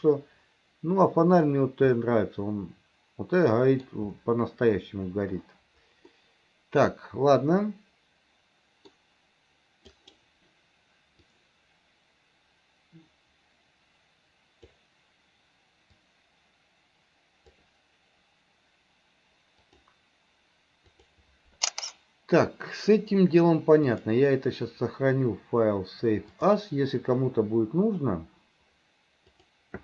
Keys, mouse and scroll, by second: 2.0-3.9 middle drag, 6.2 middle click, 7.7-8.9 middle drag, 23.9-26.7 drag.